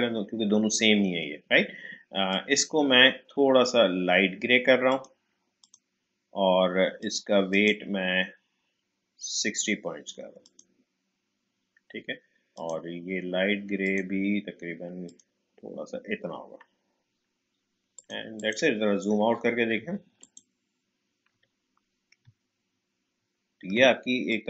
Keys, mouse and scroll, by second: 2.3 click, 4.9 click, 10.4 click, 17.9 click, 20.2 click, 21.3 Delete, 22.3-22.9 alt+scroll down 1, 24.3-24.4 drag.